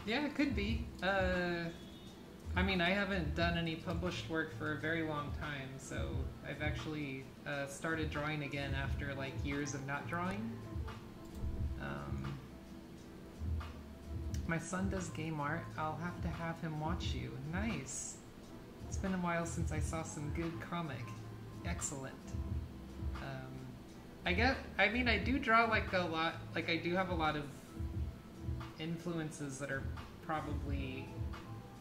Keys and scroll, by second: 0.0-5.1 typing, 14.1-16.4 typing.